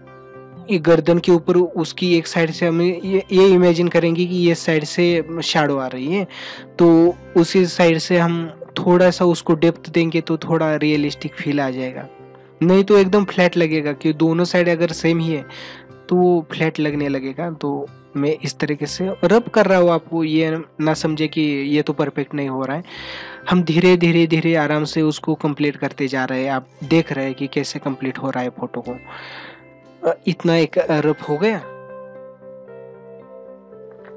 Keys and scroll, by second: 3.9 ctrl+alt+z, 10.1 ctrl+alt+z, 19.7 ctrl+alt+z.